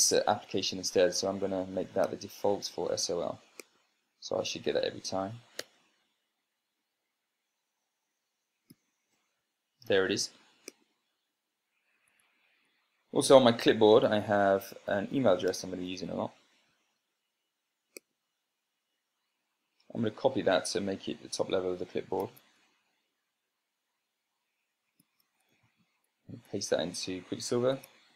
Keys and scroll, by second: 6.1 Return, 9.2 ctrl+p, 12.6 Escape, 16.0 ctrl+shift+l, 22.6 super+c, 25.5 ctrl+shift+l, 26.2 super+space, 26.9 super+v, 28.0 Tab.